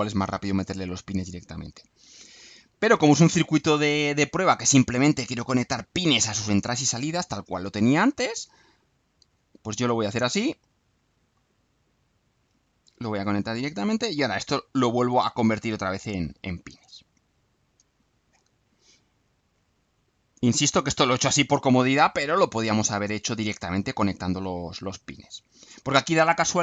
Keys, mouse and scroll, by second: 2.8 Delete, 3.9-5.0 drag, 5.2-6.2 right drag, 7.5-8.3 drag, 8.9-9.6 drag, 10.1-10.8 drag, 11.0-11.6 drag, 12.1 click, 13.1 click, 14.4 click, 15.8 click, 17.2 click, 17.9 click, 18.6 click, 20.3 click, 21.5 click, 22.3 click, 23.4 click, 25.0 click, 26.0 click.